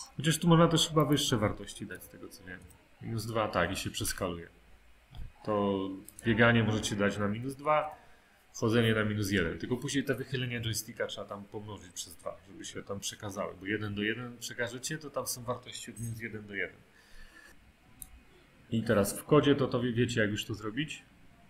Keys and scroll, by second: 2.0 2, 2.6 Return, 7.3 1, 7.8 Return.